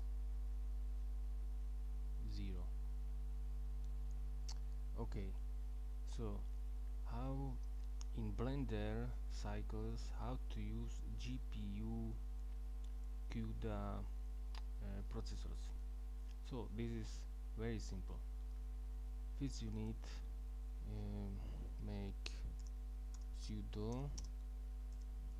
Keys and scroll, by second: 0.0 Right, 22.4-25.3 typing.